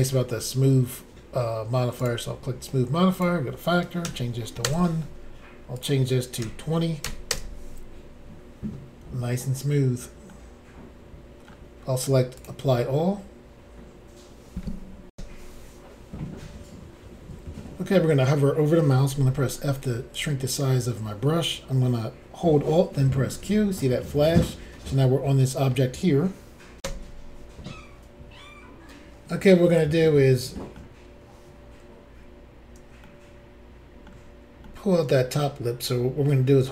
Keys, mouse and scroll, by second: 2.0 click, 2.0 click, 3.1 click, 3.2 click, 4.0 1, 4.6 Return, 5.8 click, 6.4 2, 7.0 0, 7.3 Return, 10.3 middle click, 12.4 click, 15.1 Insert, 19.1 f, 20.1 click, 20.2 click, 23.3 alt+q, 26.8 Insert, 29.7 middle click, 32.1 scroll up 2, 33.0 shift+middle click, 34.6 middle click.